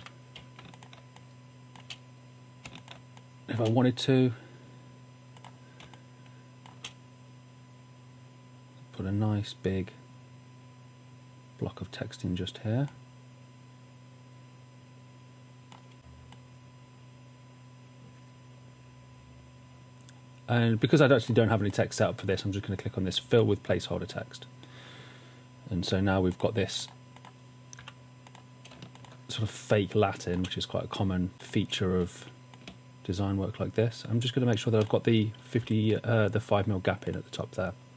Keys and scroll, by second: 0.0-0.4 typing, 1.4 typing, 2.7 space, 6.0 space, 27.8 w, 28.7 space, 35.7 shift+Down.